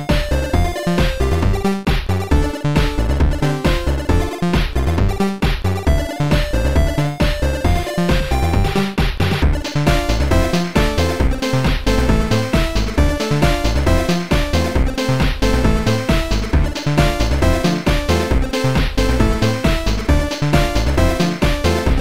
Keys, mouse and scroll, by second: 2.2 click, 4.8 click, 6.8 click, 6.8 right click, 7.5 right click, 7.5 click, 9.9 click, 9.9 right click, 14.0 click, 21.1 click.